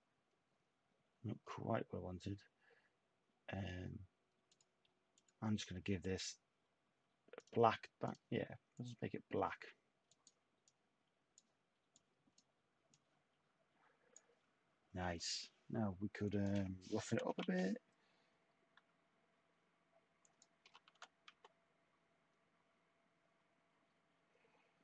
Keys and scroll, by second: 16.8-17.8 typing, 20.6-22.1 typing, 21.3 Tab.